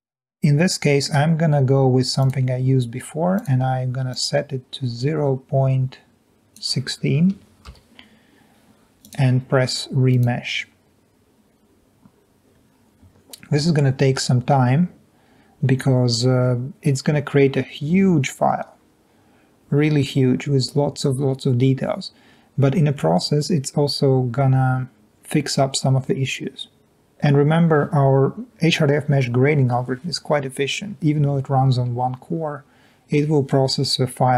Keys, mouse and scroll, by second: 7.4 1, 7.8 6.